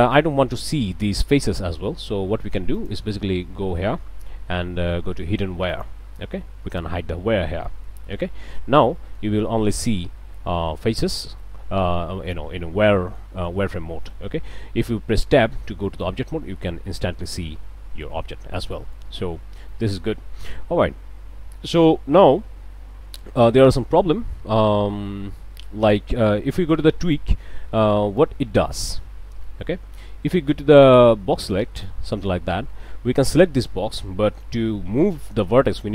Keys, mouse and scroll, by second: 2.8 click, 5.7 click, 7.5 click, 8.2 scroll down 1, 9.0 click, 9.4 a, 10.8 click, 13.0 click, 13.5 middle click, 13.6 scroll up 1, 14.2 scroll down 1, 15.3 Tab, 15.9 middle click, 17.1 click, 18.2 Tab, 18.7 click, 19.1 Tab, 19.7 click, 25.1 middle click, 27.0 click, 28.2 click, 29.4 middle click, 30.3-32.1 drag, 33.2 click.